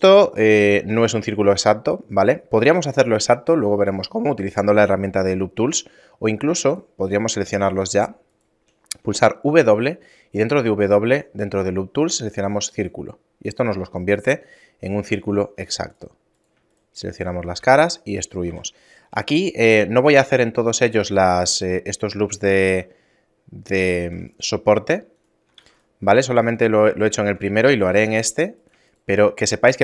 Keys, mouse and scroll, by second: 0.4 shift+middle click, 6.7 shift+right click, 7.2 shift+right click, 7.8 shift+right click, 8.3 shift+right click, 9.5 w, 14.1 shift+middle click, 15.3 ctrl+Tab, 16.3 right click, 16.7 shift+right click, 17.0 shift+right click, 17.6 e, 18.5 a, 18.8 shift+middle click, 21.0 ctrl+r, 24.0 ctrl+r, 27.9 ctrl+Tab, 28.6 right click, 28.9 shift+right click, 29.3 shift+middle click, 29.7 shift+right click.